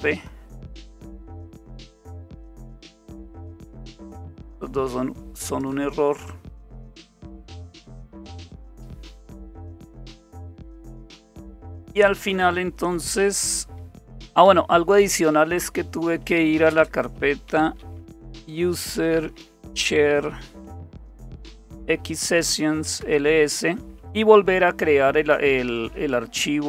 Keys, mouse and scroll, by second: 1.4-2.9 drag, 4.0-5.7 drag, 6.3-7.2 scroll down 2, 7.2-8.7 scroll down 1, 8.7-9.6 scroll down 1, 9.6-12.0 scroll down 1, 12.0 click, 12.7 click, 16.1-23.7 typing.